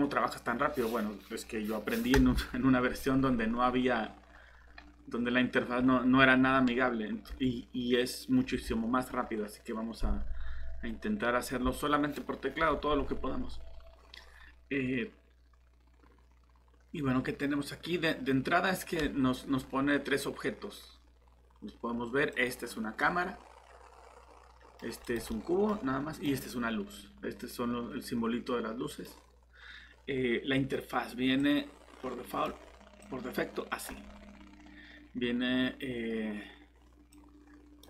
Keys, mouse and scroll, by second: 22.3 click, 23.2 middle click, 25.0 click, 25.3 middle click, 26.1 click, 34.1-35.0 scroll up 1, 37.1 click.